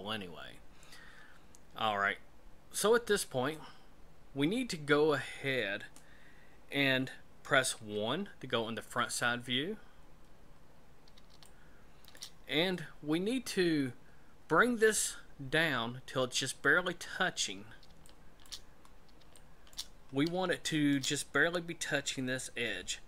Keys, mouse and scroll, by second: 7.7 KP_1, 9.7-10.6 scroll down 4, 10.6-11.1 scroll down 3, 11.4 shift+middle click, 17.3-18.0 scroll up 3, 18.0 shift+middle click, 18.7-19.3 scroll up 4, 19.3 shift+middle click, 19.9-20.3 scroll up 3, 20.5 shift+middle click.